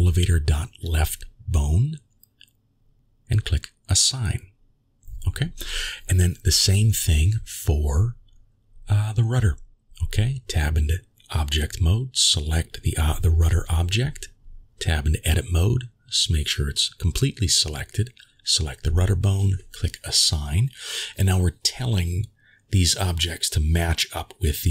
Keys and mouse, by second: 1.4-4.1 drag, 7.2 click, 8.4 click, 9.9 Tab, 11.4-11.7 shift+middle drag, 13.9 click, 16.3 Tab, 17.7 a, 20.9 click, 23.3 middle click.